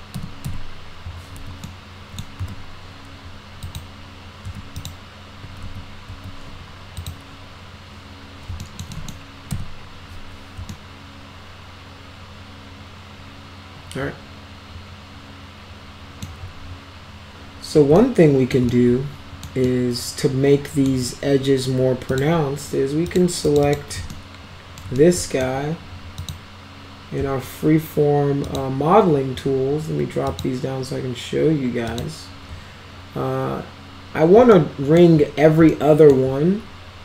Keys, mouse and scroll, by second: 0.1 F3, 0.5 F4, 1.6 alt+middle click, 2.4 z, 3.7 click, 4.5 z, 4.8 click, 5.6 ctrl+z, 6.1 ctrl+z, 7.0 click, 8.6 alt+middle click, 8.9 middle drag, 9.5 F4, 10.7-16.2 alt+middle drag, 18.0-18.5 alt+middle drag, 18.7-19.5 alt+middle drag, 19.7-20.9 alt+middle drag, 22.1 click, 23.1 click, 23.5 click, 23.6 click, 24.1 alt+middle click, 25.0 alt+middle click, 26.2 click, 28.5 click, 30.3 click, 31.9 click, 34.5-35.0 alt+middle drag, 35.7-36.1 alt+middle drag.